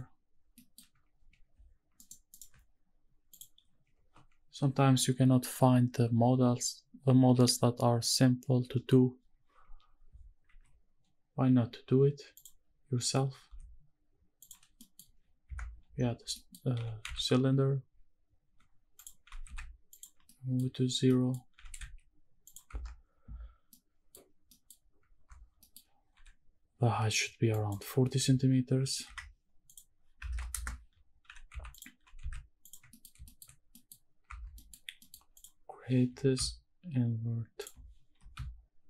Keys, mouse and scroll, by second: 0.5 middle click, 2.0 shift+right click, 2.3 shift+right click, 3.3 click, 10.5 shift+a, 13.5 s, 14.4 click, 14.7 scroll up 2, 14.7 middle drag, 15.5 KP_Decimal, 15.9-16.3 scroll down 3, 16.3 middle click, 16.7 g, 17.0 z, 19.0 drag, 19.2 g, 19.5 z, 19.9 ctrl+click, 20.1 scroll down 1, 20.2 middle click, 20.7 scroll up 3, 21.0 scroll down 2, 21.1 middle click, 21.5 scroll up 1, 21.7 g, 21.9 shift+z, 22.5 click, 22.7 Tab, 23.7 middle click, 24.3 scroll down 1, 24.5 middle click, 24.8 scroll down 1, 25.1 Tab, 25.6 middle click, 26.1 n, 27.5-29.1 drag, 29.6 click, 31.2 g, 31.5 z, 31.7 click, 31.9 g, 32.2 z, 32.6 ctrl+click, 32.9 middle click, 33.2 shift+middle drag, 33.2-34.2 shift+scroll up 4, 33.7 middle drag, 34.2 Tab, 34.5 middle click, 35.0 middle click, 35.3 click, 36.1 i, 37.6 shift+click, 38.1 i.